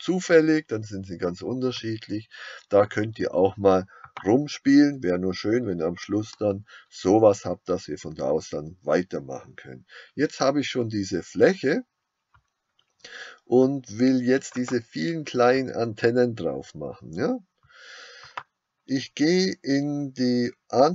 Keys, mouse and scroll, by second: 4.2 click.